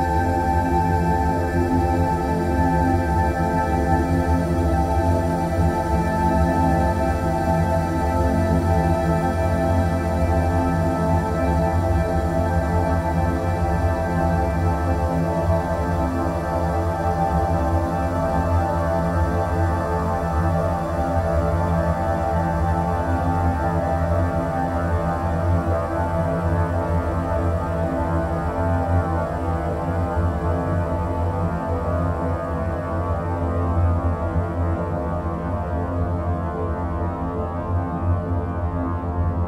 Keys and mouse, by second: 1.4 Tab, 2.3 1, 4.9 g, 16.2 Tab, 17.2-18.4 middle drag, 20.2 Tab, 22.4 click, 26.7 click, 28.5 click, 29.0-35.5 drag, 37.6 g.